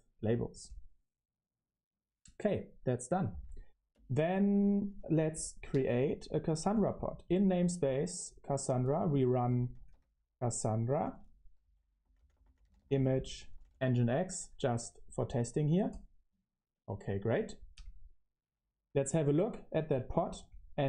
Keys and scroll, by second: 2.8-5.5 typing, 7.4-15.2 typing, 15.3 Return, 19.8-20.8 typing.